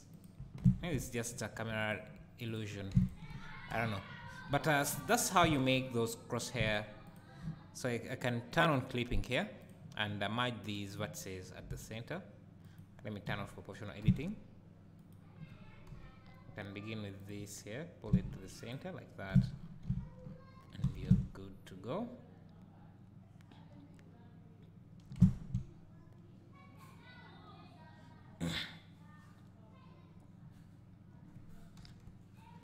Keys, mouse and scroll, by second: 0.1 click, 0.6 Tab, 1.4 1, 1.8 alt+click, 2.5 click, 3.0 shift+click, 3.8 KP_Decimal, 4.4 scroll down 1, 5.0-5.4 scroll down 1, 6.3 click, 6.7 shift+click, 7.1 shift+click, 8.2 click, 8.5 click, 9.6 click, 10.6 click, 11.6 g, 12.8 right click, 13.3 o, 14.0 g, 15.1 right click, 15.9 KP_7, 17.2 click, 18.1 g, 18.7 click, 19.3 Tab, 19.6 scroll down 1, 20.2 scroll down 1, 20.9 alt+a, 21.0 `, 25.4 Tab, 31.8 KP_7.